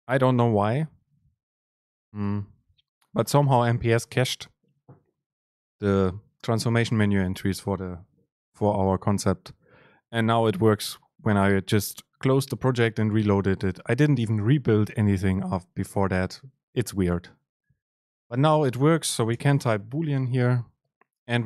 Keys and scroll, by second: 2.2 super+space.